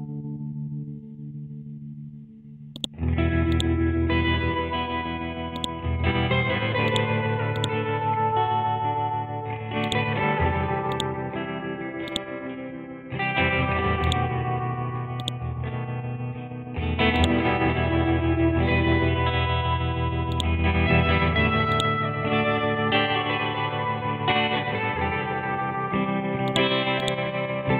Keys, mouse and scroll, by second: 9.8 right click, 10.9-24.5 drag, 25.5-26.0 scroll down 1, 26.0-26.5 scroll up 1, 26.5 click.